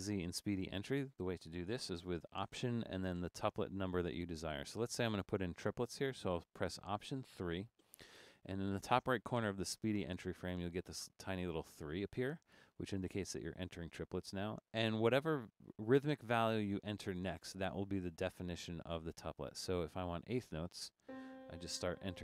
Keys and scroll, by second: 7.5 alt+3, 21.9-22.2 typing.